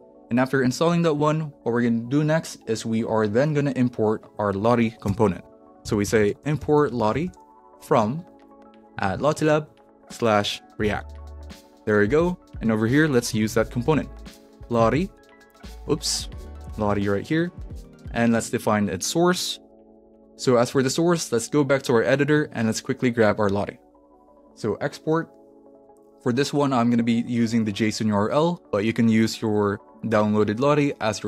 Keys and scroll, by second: 5.1 Return, 5.2-11.5 typing, 12.6 Return, 13.1-15.3 typing, 14.9 alt+shift+Left, 15.9 super+z, 16.8 shift+,, 17.3 Right, 17.8 space, 18.0 /, 18.3 Left, 19.1-20.9 typing, 22.3 super+s, 23.8 s.